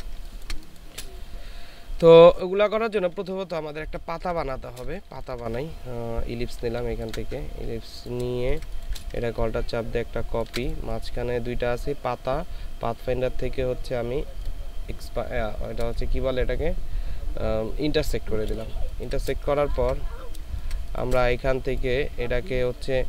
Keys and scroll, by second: 0.1 ctrl+space, 3.7 space, 4.9 ctrl+shift+space, 8.3 space, 9.1 ctrl+alt+space, 18.8 ctrl+space, 19.8 ctrl+z, 20.4 ctrl+space.